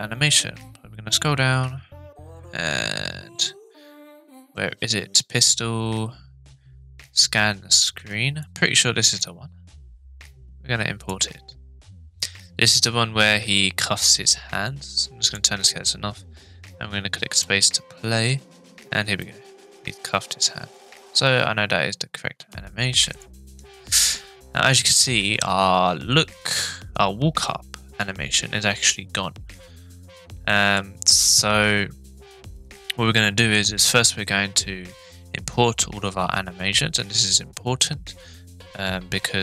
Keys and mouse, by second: 15.2 click, 17.3 space, 19.3-21.1 middle drag, 22.4 space, 23.1 click, 30.5-30.8 middle drag.